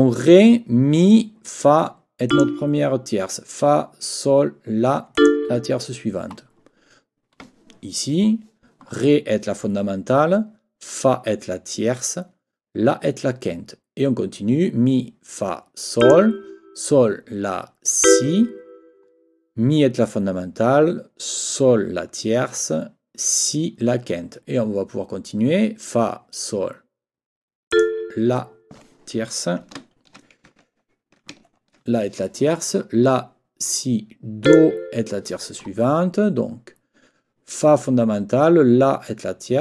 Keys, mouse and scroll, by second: 2.3 click, 5.2 click, 16.0 click, 18.0 click, 27.7 click, 29.8 ctrl+scroll down 2, 29.9 ctrl+middle click, 30.6 shift+middle click, 30.6-31.0 shift+scroll up 1, 31.5 ctrl+shift+scroll down 2, 31.7 ctrl+middle click, 34.4 click.